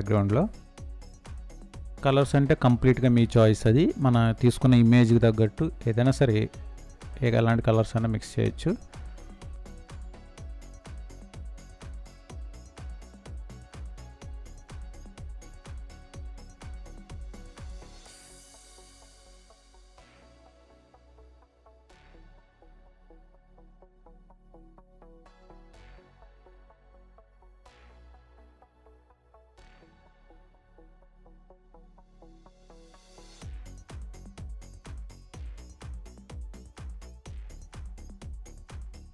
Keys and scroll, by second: 0.7 space, 19.2 ctrl+z, 36.4 ctrl+-, 37.0 ctrl+-.